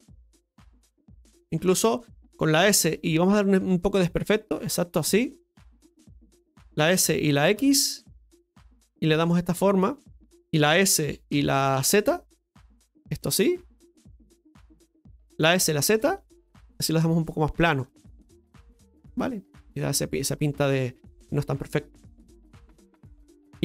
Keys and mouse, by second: 1.2 Tab, 1.2-3.2 middle drag, 5.3 right click, 5.7 alt+shift+right click, 8.5 s, 8.9-11.5 middle drag, 14.0 right click, 17.8-18.8 middle drag, 19.0 Tab, 19.5-21.2 middle drag, 22.7-23.4 middle drag, 23.4 KP_Divide.